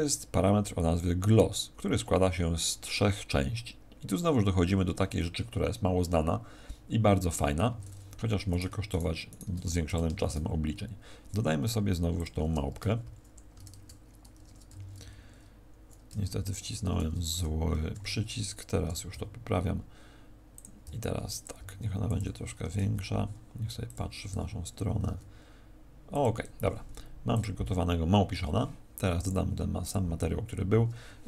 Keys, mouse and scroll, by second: 7.5 Escape, 8.4 right click, 8.8 shift+right click, 9.2 right click, 9.6 x, 10.1 shift+a, 13.4 alt+3, 14.6 1, 16.0 1, 16.6 2, 17.8 ctrl+3, 18.8 r, 20.5 click, 20.8 g, 21.4 click, 21.5 s, 22.1 click, 22.4 r, 23.8 click, 24.2 r, 26.1 click, 26.6 t, 27.2 click, 28.2 t, 29.2 click, 30.5-31.0 scroll down 7.